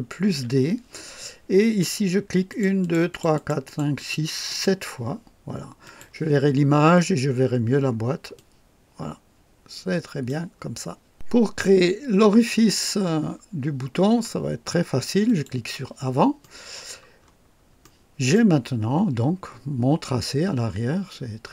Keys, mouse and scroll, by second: 0.2 ctrl+d, 2.5 click, 3.0-4.0 drag, 4.1 click, 4.5 click, 5.9 click, 7.4 scroll down 1, 7.8 scroll up 1, 8.4-10.5 drag, 12.9 scroll down 1, 15.2 click, 16.4 right click, 17.2-17.5 scroll up 1, 17.8-18.5 right drag.